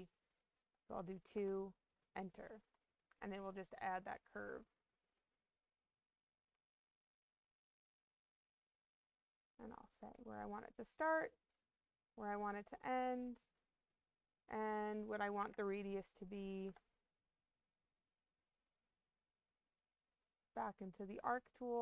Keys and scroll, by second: 1.2 Return, 15.3 2, 16.6 Return.